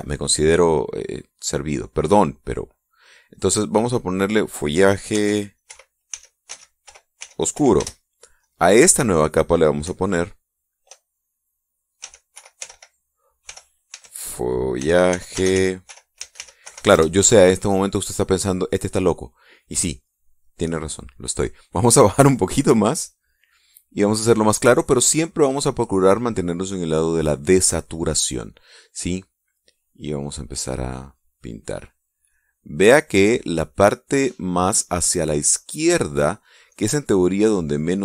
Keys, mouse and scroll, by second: 2.2 click, 3.1 click, 3.7 click, 4.7 click, 5.7-8.6 typing, 9.0 click, 9.3 click, 12.3-17.7 typing, 22.9-26.5 drag, 29.7 click, 30.1-32.5 drag, 32.9 click, 33.5-34.5 drag, 35.5-37.7 drag.